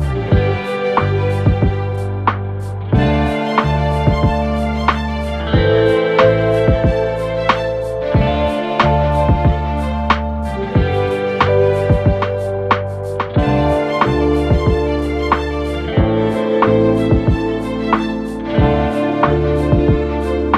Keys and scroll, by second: 1.0 F1, 5.7 3, 6.2 ,, 17.1 F1.